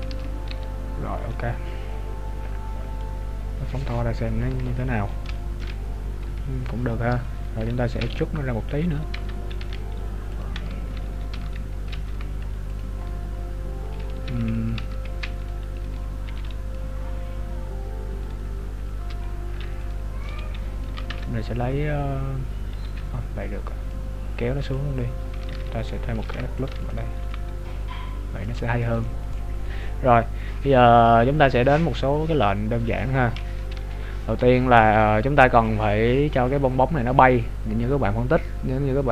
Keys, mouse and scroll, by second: 0.1 z, 0.8-1.4 scroll down 3, 0.8 z, 1.4 middle click, 3.3-4.9 scroll down 21, 5.1-5.4 scroll up 3, 5.4 shift+middle click, 5.9 scroll up 1, 6.3 KP_3, 6.7 scroll up 1, 7.9 e, 9.3 Tab, 9.7 e, 10.5 Tab, 11.5 Tab, 12.1 g, 12.9 scroll up 2, 14.1 ctrl+z, 14.1 scroll up 5, 14.9 ctrl+z, 15.9 right click, 16.3 b, 17.2-17.9 scroll down 7, 18.3 right click, 18.4 scroll up 2, 19.0 scroll up 5, 19.0 z, 19.9 right click, 20.3 b, 21.1 ctrl+Tab, 25.1-26.3 scroll down 6, 26.3 ctrl+r, 27.3 g, 28.9 right click, 31.5-32.6 scroll down 11, 32.6-33.8 scroll up 6, 33.8 scroll down 2, 34.1 scroll up 1, 36.2-37.3 scroll down 11.